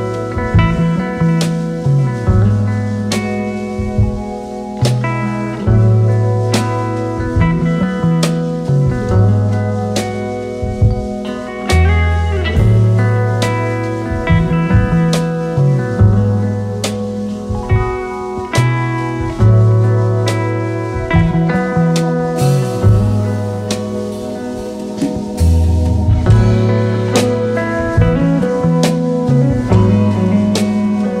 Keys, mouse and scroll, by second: 0.7-1.6 typing, 1.9 Return, 5.3-6.5 typing, 6.1-6.4 alt+scroll up 3, 9.7 double click, 11.2 v, 17.8 double click, 18.3-18.7 alt+scroll down 3, 19.1 space, 19.1-19.9 alt+scroll down 2, 20.4 alt+scroll down 1, 21.2-23.2 typing, 21.7 alt+scroll up 1, 26.1-26.8 typing, 30.6-31.2 scroll up 1.